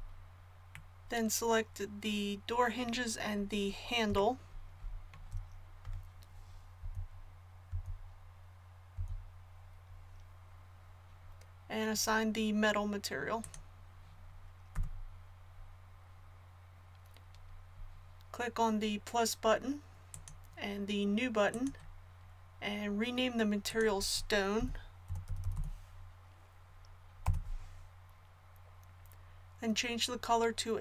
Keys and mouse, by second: 1.7-3.3 middle drag, 4.2-6.8 middle drag, 6.8 l, 7.7 l, 13.4-15.3 drag, 14.7 a, 20.1-25.5 drag.